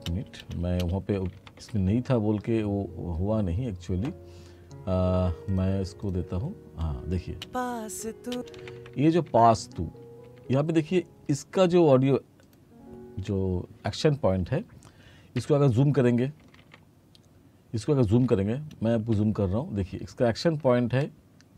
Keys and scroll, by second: 1.2 r, 7.4 space, 8.6 t, 15.4 t, 19.2 e.